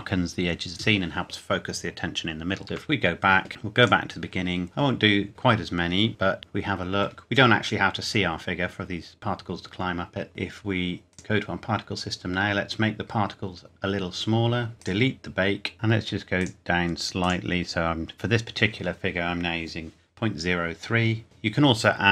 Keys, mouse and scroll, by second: 2.6 scroll up 1, 2.9 Escape, 3.8 click, 6.4-8.0 scroll up 1, 10.3 click, 11.7-12.4 scroll up 1, 12.4-14.4 scroll down 1, 14.8 click, 15.7-16.1 scroll up 1, 16.4 click.